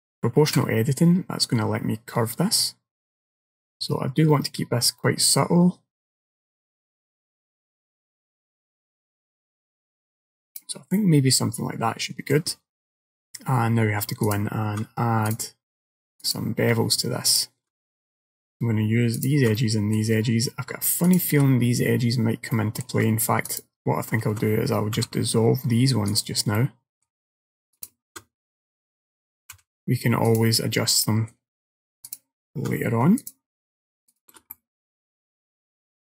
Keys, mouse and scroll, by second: 11.0 middle click, 13.0 middle click, 14.3 alt+click, 15.3 click, 16.3 alt+click, 17.4 alt+shift+click, 18.0 middle click, 19.2 alt+shift+click, 19.6 middle click, 21.1 alt+shift+click, 22.6 middle click, 23.6 alt+click, 25.0 x, 26.6 middle click, 27.8 alt+click, 29.6 x, 31.1 middle click, 32.1 alt+click, 33.3 click, 34.2 alt+shift+click, 34.6 middle click.